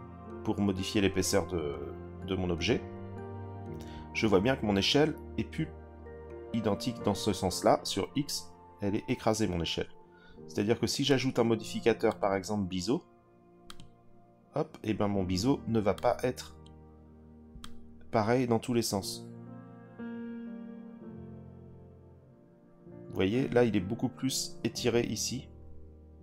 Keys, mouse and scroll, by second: 11.1 click, 12.1-13.9 drag, 15.9 click, 17.6-24.4 drag.